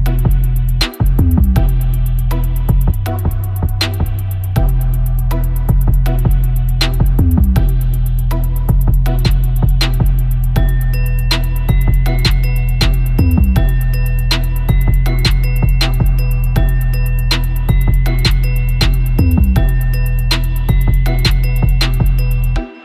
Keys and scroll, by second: 0.6 super+e, 1.1 super+e, 12.1 super+=, 12.2 super+=, 12.3 space, 12.4 space, 12.8 super+=, 13.2 super+=, 13.3 space, 14.9 super+i, 15.2 super+i, 15.3 super+u, 15.9 super+z, 16.2 shift+super+i, 16.3 super+u, 17.0 Return, 17.0 super+d, 17.1 super+-, 17.4 super+=, 22.1 super+-, 22.1 super+-, 22.2 super+=.